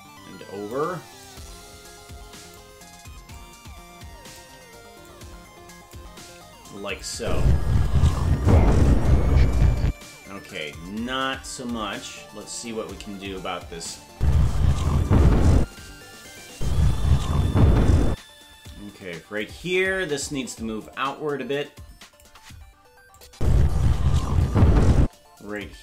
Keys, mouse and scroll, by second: 1.2-2.6 drag, 3.3-4.4 shift+drag, 5.0 click, 7.0 click, 7.2 space, 11.6-12.9 scroll up 7, 13.9 click, 14.1 space, 15.6 space, 16.3 click, 16.5 space, 18.1 space, 18.7 click, 20.9-22.2 shift+drag, 23.2 click, 23.3 space, 25.0 space, 25.6-25.8 drag.